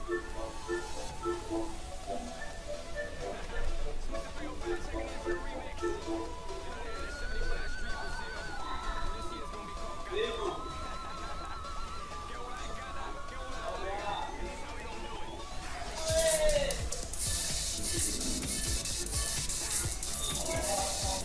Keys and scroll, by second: 8.6 ctrl+-.